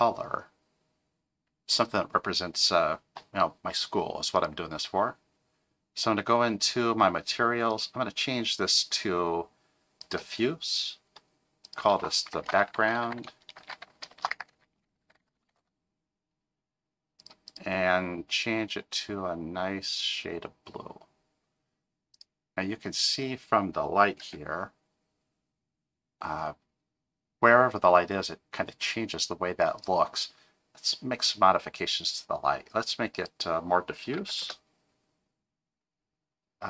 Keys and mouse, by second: 4.4 click, 7.8-10.1 drag, 11.8-17.4 drag, 22.2 click, 24.2 g, 33.3-35.2 drag.